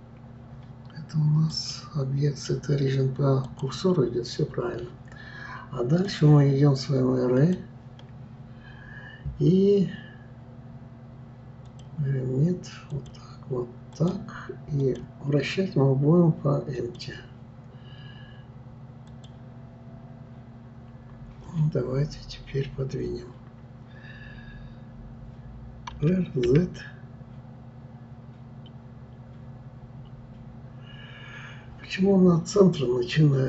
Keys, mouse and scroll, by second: 1.5-4.5 drag, 6.0-9.0 drag, 11.7 click, 12.9 click, 13.9 click, 14.8-17.8 drag, 19.1-20.7 drag.